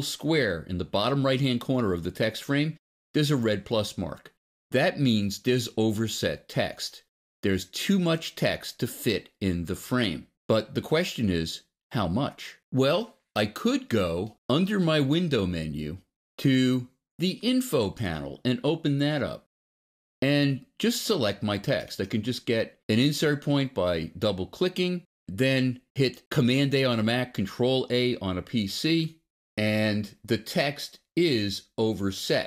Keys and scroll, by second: 26.5 super+a.